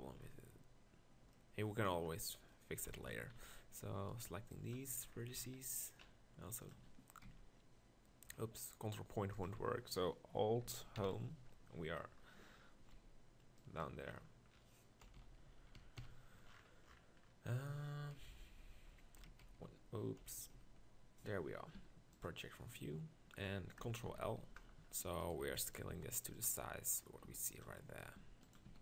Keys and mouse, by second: 3.0 KP_1, 3.1 Tab, 3.3 z, 4.3 b, 7.2 ctrl+KP_Decimal, 10.9 alt+Home, 12.9 b, 15.0-15.9 KP_4, 18.1 KP_4, 19.2-20.7 typing, 21.8 u, 24.1 ctrl+l, 25.4 b, 25.9 s, 27.1-27.6 middle drag, 27.3 s, 28.2 g, 28.7 s.